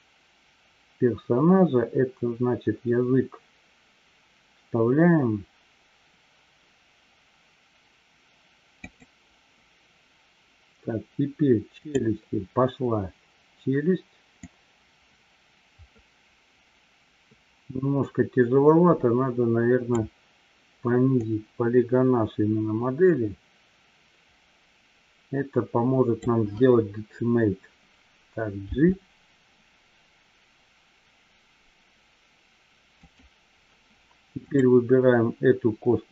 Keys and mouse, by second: 9.2 click, 14.8-20.4 drag, 21.2-26.7 drag, 33.3 click.